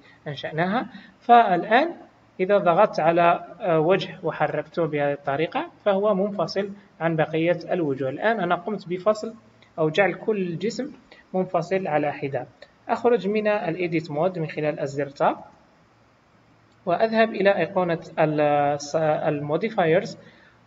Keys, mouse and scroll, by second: 2.4 click, 4.3 g, 15.4 Tab, 17.4 click.